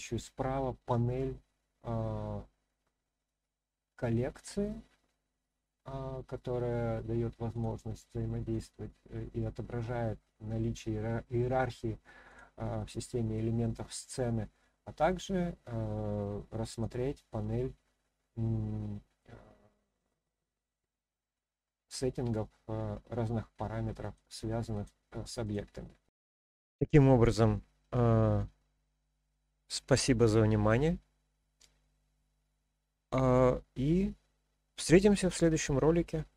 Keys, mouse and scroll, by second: 7.5 click, 8.5 click, 12.2 click, 16.7 click, 24.0 click, 24.7 click, 25.4 click, 29.5-30.8 middle drag, 32.6-35.0 middle drag.